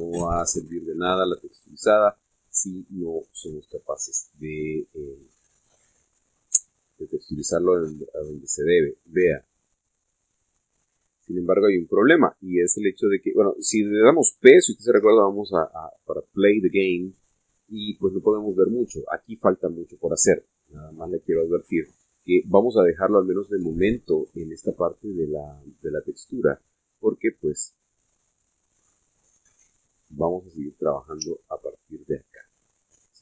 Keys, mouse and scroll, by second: 0.1-2.4 middle drag, 6.7 click, 9.3 click, 10.3-11.8 middle drag, 13.1 scroll down 2, 13.5-13.8 scroll up 2, 14.0 scroll down 2, 15.9 p, 19.5 Escape, 22.1-24.3 middle drag, 24.4-25.7 middle drag, 29.7 click, 31.2 click, 32.2 Tab, 32.9-33.2 middle drag.